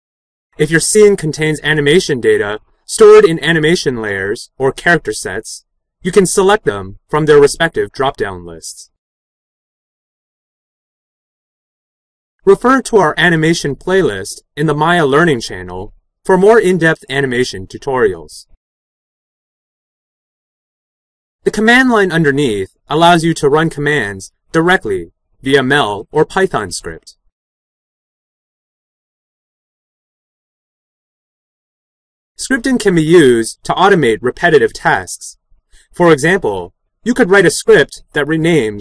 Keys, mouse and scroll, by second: 9.6-10.9 right drag.